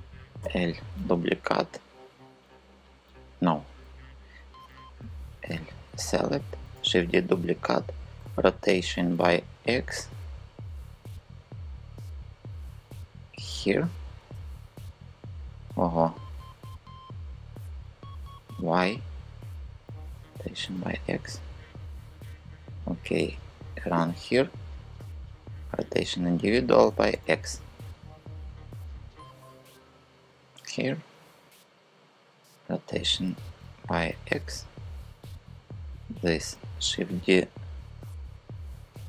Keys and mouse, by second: 0.1 l, 4.6 KP_3, 6.3 shift+d, 6.7 Return, 7.8 r, 8.7 x, 12.7 click, 17.7 super+z, 19.6 r, 20.3 x, 23.6 click, 24.8 click, 26.4 r, 26.8 x, 31.8 click, 32.9 r, 33.8 x.